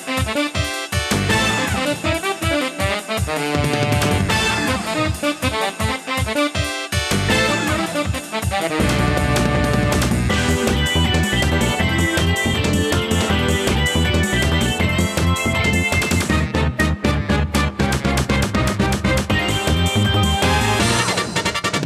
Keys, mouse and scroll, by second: 3.7 click, 5.6 click, 8.9 shift+middle click, 10.7 click, 13.9 click, 17.5 middle click, 19.0 n, 19.4 middle click, 19.9-21.2 scroll up 6, 21.4 shift+a.